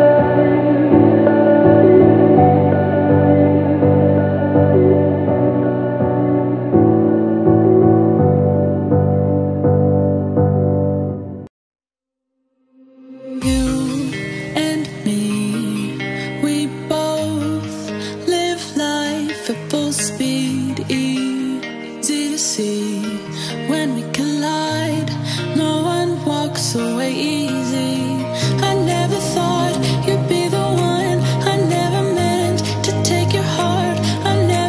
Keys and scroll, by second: 0.0-3.2 typing, 4.3 BackSpace, 4.4 BackSpace, 4.6 BackSpace, 5.2 BackSpace, 6.3-9.2 typing, 32.3 BackSpace, 33.7-34.6 typing.